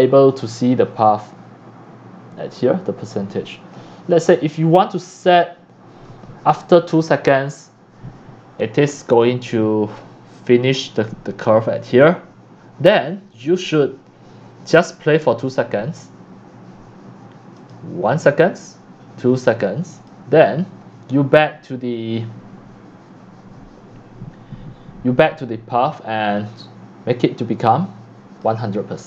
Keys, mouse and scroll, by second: 2.5-4.6 drag, 5.0-7.8 drag, 9.2-13.1 drag, 13.2 scroll down 1, 17.6 click, 19.9 click, 21.0 right drag, 21.4 click, 24.0-25.3 drag, 26.6-28.4 alt+drag, 28.9 click.